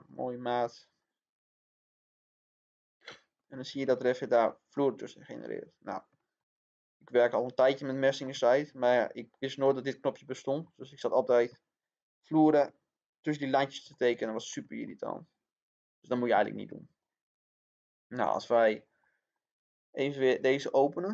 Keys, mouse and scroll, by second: 3.8-8.2 middle drag, 9.3 scroll down 1, 9.6-16.2 middle drag, 16.9 scroll up 1, 18.0 click, 18.6 scroll down 1, 19.0-20.2 middle drag, 20.4 click.